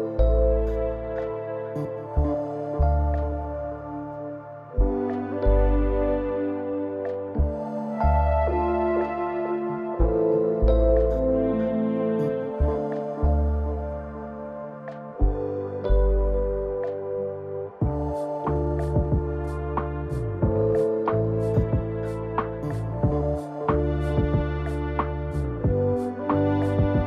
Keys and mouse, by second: 0.0 n, 5.0 n, 5.6 n, 12.6 click, 13.2 click, 13.7 click, 14.3 click, 15.0 click, 25.7-27.0 drag.